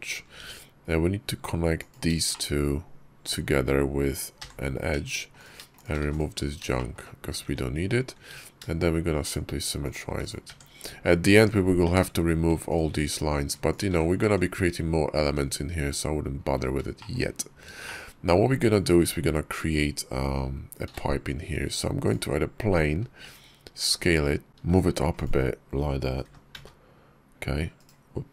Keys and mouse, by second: 0.2 Tab, 2.1 shift+click, 3.1 shift+click, 4.3 j, 4.8 Tab, 5.2 click, 5.6 shift+click, 6.1 x, 6.6 shift+click, 7.4 Tab, 8.1 alt+x, 10.5 Tab, 11.3 Tab, 11.7 Tab, 12.6 alt+click, 14.1 Tab, 15.1 Tab, 16.8 shift+click, 17.7 shift+drag, 20.9 shift+a, 23.1 s, 24.5 g, 26.1 g.